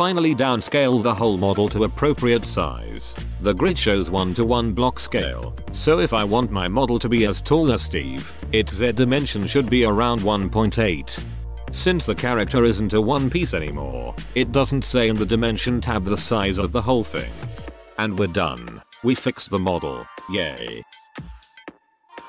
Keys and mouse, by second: 1.8-4.4 right drag, 2.5 b, 4.4 s, 8.2 s, 15.6 ctrl+a, 18.7 ctrl+KP_1, 21.4 a.